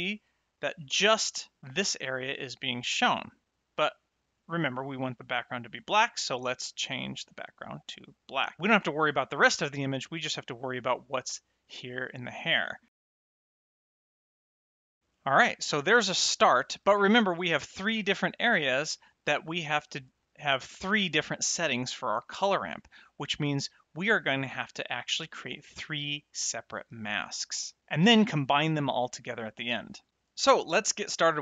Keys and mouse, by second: 0.1 middle click, 5.5 click, 7.5 click, 13.0 a, 13.1 s, 13.3 click, 13.5 click, 13.7 click, 14.0 click, 14.9 middle click, 15.8 middle click, 20.7 click.